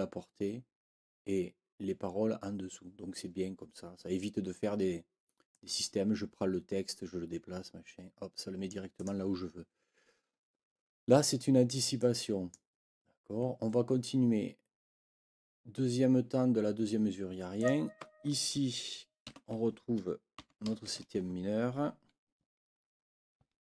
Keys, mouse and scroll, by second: 5.5-8.8 drag, 9.0 click, 12.0 click, 17.6 click, 19.2 ctrl+l, 20.4 b, 22.4 Right, 23.4 Right.